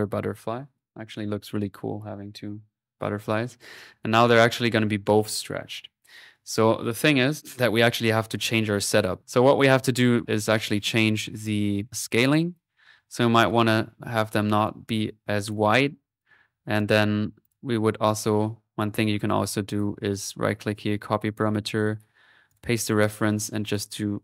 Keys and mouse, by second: 6.1-7.2 middle drag, 7.4 click, 8.2 middle click, 8.4 click, 8.8 middle click, 9.8-10.9 drag, 12.3-16.1 drag, 16.2-17.5 drag, 18.9 right click, 19.8 click, 20.1 right click, 20.8 click, 21.4 right click, 22.5-24.2 drag.